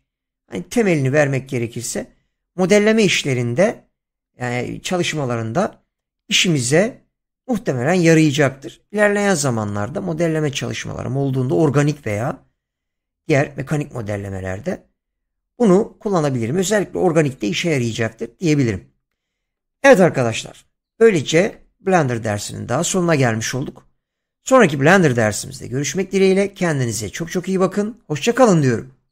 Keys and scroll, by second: 20.9 Tab.